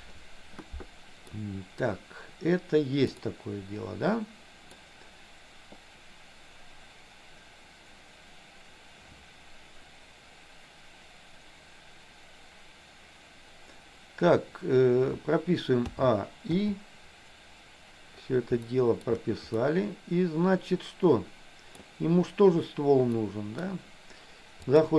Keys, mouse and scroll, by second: 1.5-4.9 middle drag, 15.9 a, 16.6 i, 18.8 shift+middle click, 19.6-21.8 middle drag, 23.2 middle click, 24.8 click.